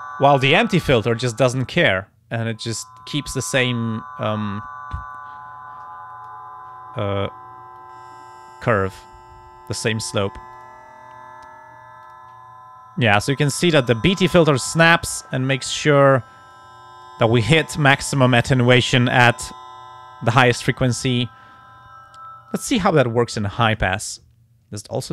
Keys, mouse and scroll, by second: 1.5-3.2 drag, 5.0-6.5 drag, 7.8-10.1 drag, 10.5 click, 12.1 click, 13.2-14.7 drag, 15.6 click, 16.0 click, 16.5 click, 22.5 click, 23.7 click.